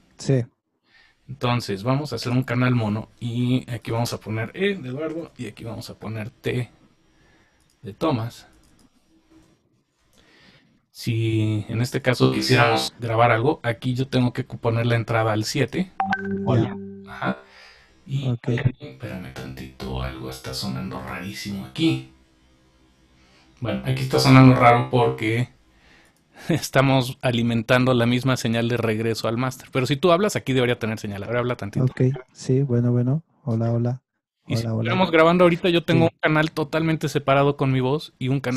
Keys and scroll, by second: 33.6 super+space.